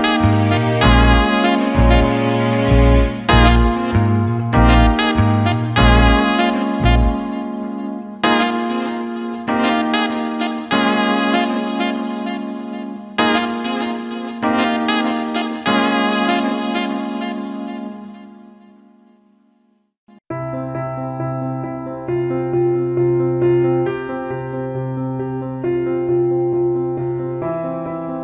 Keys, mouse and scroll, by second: 0.4 ctrl+KP_Add, 3.6 click, 4.8 click, 5.4 click, 10.6 click, 12.5 alt+middle click, 13.1 click, 13.9 alt+middle click, 14.3 click, 15.9 Tab, 16.4 alt+shift+middle click, 16.9 middle click, 18.5 click, 18.8 alt+middle click, 19.8 click, 21.6 click, 23.4 click, 24.4 alt+middle click, 25.6 alt+middle click, 26.4 click, 27.6 alt+shift+middle click.